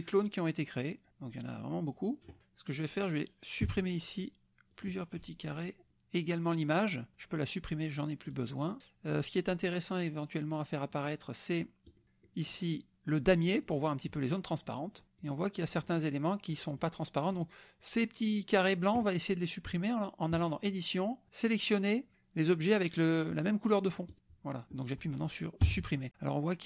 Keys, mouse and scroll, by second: 0.0-1.1 scroll up 1, 1.1-2.1 drag, 2.4 click, 3.6 Delete, 4.7 click, 8.3 click, 11.9 click, 13.6 click, 14.6 click, 15.4 click, 15.9 click, 16.7 click, 17.3 click, 20.3 click, 25.8 Delete.